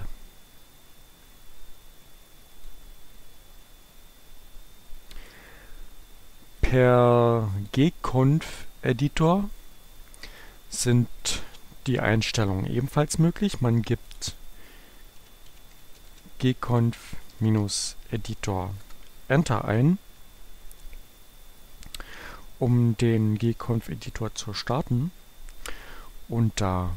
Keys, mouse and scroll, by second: 1.4-3.2 drag, 6.6 click, 7.7 click, 9.0-11.0 drag, 11.3 click, 14.1 click, 15.0-18.4 typing, 18.7 Return.